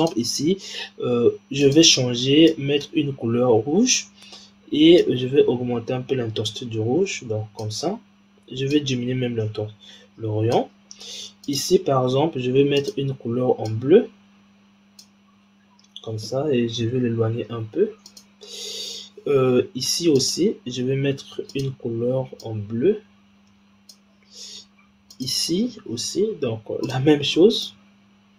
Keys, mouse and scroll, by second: 1.5 click, 4.9-7.9 drag, 8.6-11.7 drag, 12.7 click, 16.8 g, 20.1 click, 21.4 click, 25.0 click, 26.8 click.